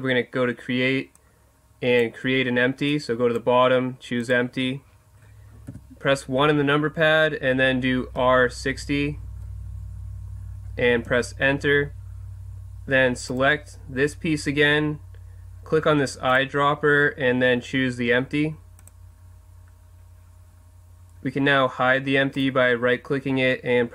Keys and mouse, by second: 1.1-5.7 drag, 5.7 KP_1, 8.2 r, 13.3 right click, 16.3-18.1 drag, 18.1 right click, 22.4 right click.